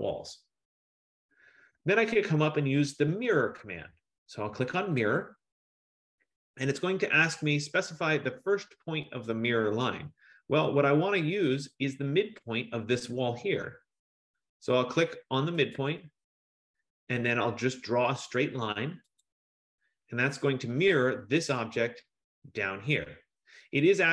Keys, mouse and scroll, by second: 5.3 click, 8.1-9.2 scroll, 9.2-9.7 scroll, 10.5 middle click, 14.5 scroll, 15.8 click, 19.3 click.